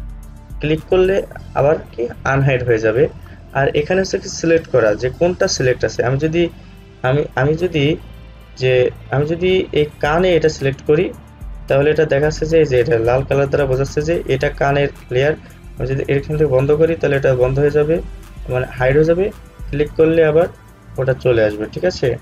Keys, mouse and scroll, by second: 12.4-14.0 scroll down 1, 16.2 click, 19.7 click.